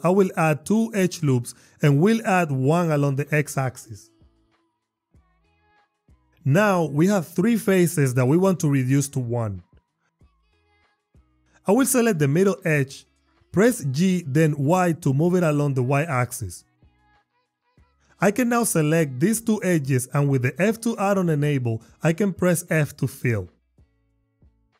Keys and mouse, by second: 2.5 ctrl+r, 3.1 click, 3.4 click, 4.4 click, 4.8 Tab, 5.1 click, 5.8 click, 6.0 click, 6.3 click, 7.1 click, 9.3 click, 9.9 Tab, 10.4 click, 13.2 g, 15.0 y, 17.1 click, 19.4 shift+click, 22.8 f, 24.1 click.